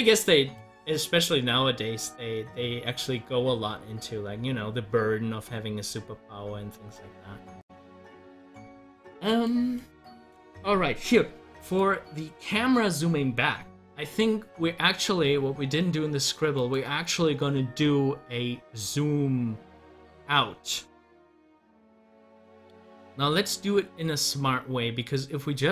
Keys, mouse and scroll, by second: 16.6 click.